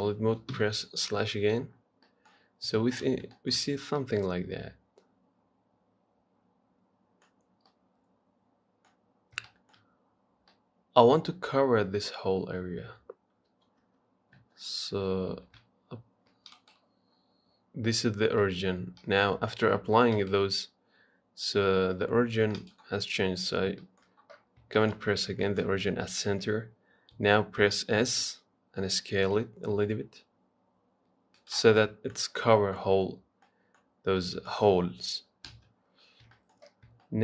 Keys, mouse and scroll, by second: 0.8 KP_Divide, 1.6-2.3 scroll down 7, 2.3 middle click, 2.5-3.0 scroll up 4, 3.0 shift+middle click, 3.3-3.6 scroll up 1, 3.6-7.5 shift+middle drag, 7.5-7.9 scroll down 2, 7.9-9.4 middle drag, 9.4 scroll up 1, 9.7-13.7 shift+middle drag, 13.7 KP_3, 14.1 KP_1, 14.6 KP_3, 15.6 s, 17.4 scroll down 4, 20.4-23.5 right drag, 23.5-24.0 scroll up 2, 24.0 shift+middle click, 24.6-25.0 scroll up 1, 25.0 shift+middle click, 25.9-26.3 scroll up 1, 26.3-27.4 shift+middle drag, 27.4 s, 32.0-33.5 middle drag, 33.5 scroll down 1, 33.7 middle click, 34.1-34.4 scroll down 1, 34.4-35.7 middle drag, 35.7 KP_3, 36.6 shift+middle click, 37.0 scroll up 2.